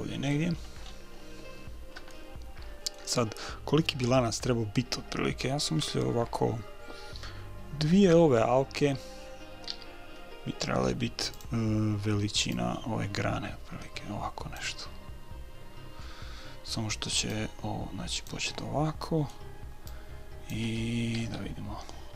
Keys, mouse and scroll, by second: 0.7-4.4 middle drag, 10.2 s, 12.9-14.6 drag, 14.7 click, 17.7-19.0 drag, 19.6 middle click, 20.8-22.1 drag, 21.6 KP_3.